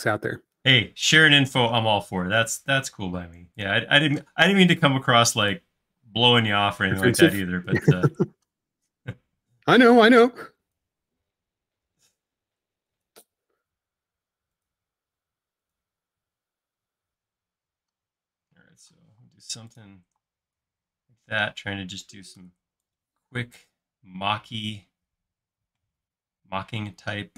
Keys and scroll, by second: 2.3 shift+q, 6.1 space, 7.8-8.2 typing, 11.6 i, 16.3 typing, 17.9 typing, 19.1 typing, 20.2 space, 21.5 typing, 22.4 Escape, 24.2 space, 26.7 |.